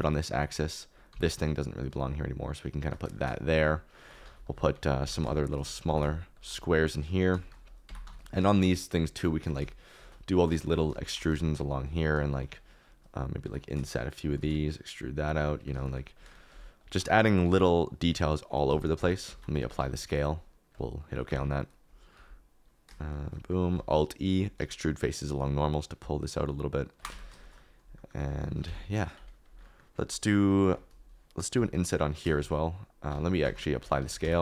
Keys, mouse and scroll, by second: 1.0 g, 3.1 shift+middle click, 3.9 shift+middle click, 4.2 alt+d, 4.7-6.6 typing, 6.3 shift+right click, 6.9 middle click, 7.4 shift+middle click, 7.8 Tab, 8.0 3, 8.4 shift+middle click, 8.9 shift+middle click, 9.4 e, 9.9 shift+middle click, 10.4 shift+middle click, 10.9 shift+middle click, 11.3 shift+middle click, 12.1 shift+middle click, 12.5 click, 13.4 i, 14.2 shift+click, 14.3 e, 15.2 shift+click, 15.2 shift+middle click, 15.7 shift+middle click, 16.2 shift+middle click, 18.1 shift+i, 18.6 Escape, 19.5 ctrl+a, 21.2 Tab, 22.1 i, 23.7 alt+e, 27.1 Tab, 28.0 middle click, 28.6 Tab, 29.1 middle click, 30.1 middle click, 32.7 i, 33.1 ctrl+z, 33.4 Tab, 33.7 ctrl+a.